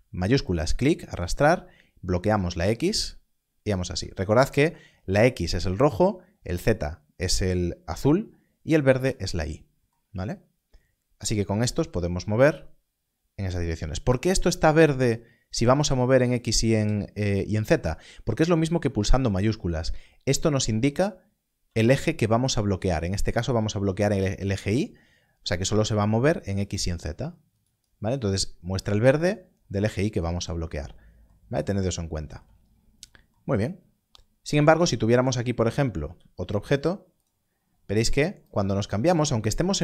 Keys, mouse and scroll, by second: 0.4 shift+click, 10.3-11.8 scroll up 1, 11.8 click, 13.5 right click, 20.9 click, 21.0 scroll up 1, 24.8 click, 27.6 click, 31.5 click, 32.5-33.9 scroll down 1, 34.7 shift+a, 35.6 click, 36.0 g, 37.2 click.